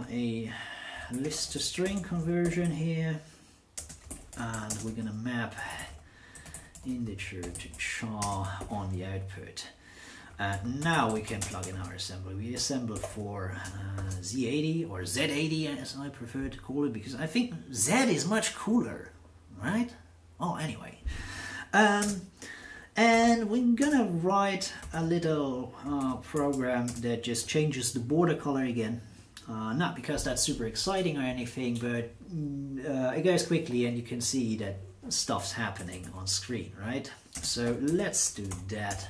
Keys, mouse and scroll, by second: 0.7-13.9 typing, 22.0 space, 23.2-25.4 typing, 26.3 alt+n, 26.8 space, 35.5-39.0 typing.